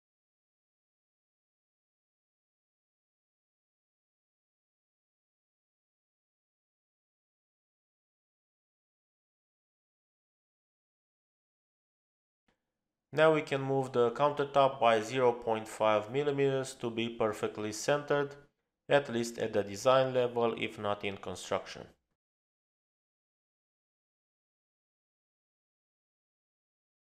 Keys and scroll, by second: 11.4 space, 14.5 m, 19.4 Left, 20.9 5, 21.8 Return, 22.7-24.9 typing.